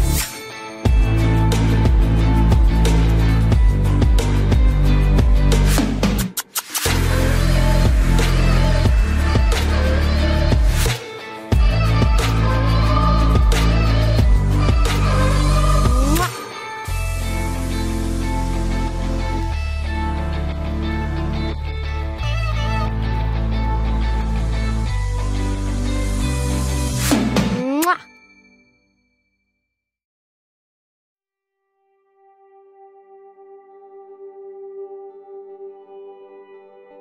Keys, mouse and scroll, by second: 1.2-4.4 right drag, 5.5-9.8 right drag, 9.1 k, 16.3 ctrl+Tab, 17.1 z, 17.7 z, 18.2-20.7 right drag, 19.3 c, 31.8-33.6 right drag, 32.2 c.